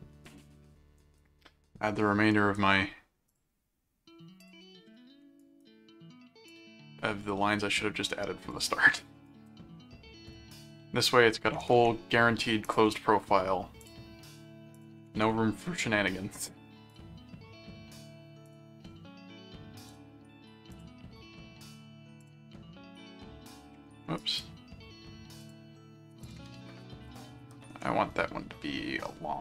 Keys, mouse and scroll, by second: 1.0 right click, 2.3 right click, 3.3 click, 4.4 click, 5.4 right click, 6.5 click, 8.5 click, 9.2 right click, 10.3 click, 11.3 click, 12.6 click, 13.8 click, 14.7 click, 16.9 click, 18.4 click, 19.9 click, 20.7 click, 22.2 click, 24.1 right click, 25.4 click, 26.2 click, 27.1 alt+click.